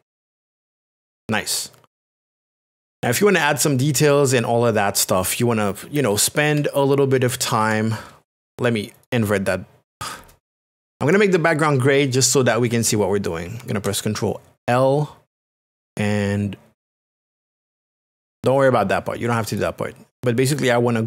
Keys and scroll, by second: 6.5 ctrl+KP_Add, 7.6 ctrl+KP_Subtract, 8.9 KP_Subtract, 13.4 ctrl+l.